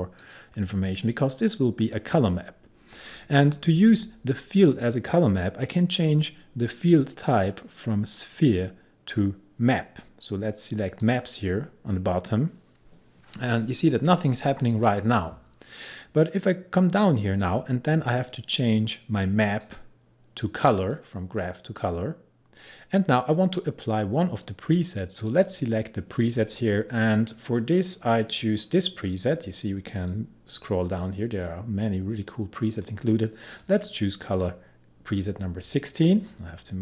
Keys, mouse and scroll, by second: 0.2 click, 8.2 click, 11.1 click, 15.9-17.8 scroll down 1, 19.7 click, 23.4-24.8 scroll down 1, 25.3 click, 27.4-28.2 scroll down 1, 28.6-36.8 drag.